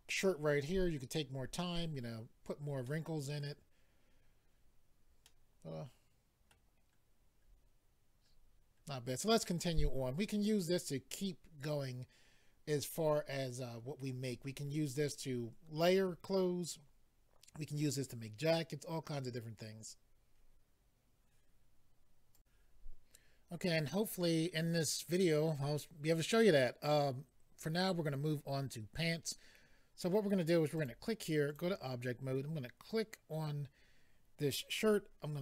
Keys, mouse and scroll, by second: 2.8 middle click, 5.2 middle click, 7.4-8.0 scroll up 3, 8.3-8.6 scroll down 2, 8.8-9.5 scroll down 2, 22.4 click, 30.8 click, 30.8 click, 31.5 click, 31.6 click.